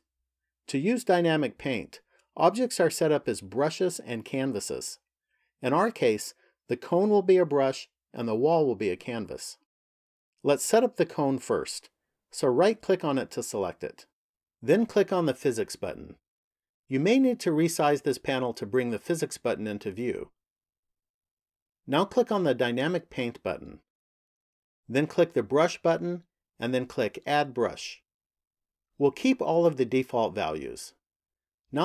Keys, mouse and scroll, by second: 12.4 right click, 16.0 click, 20.2 click, 22.4 click, 25.2 click, 27.2 click.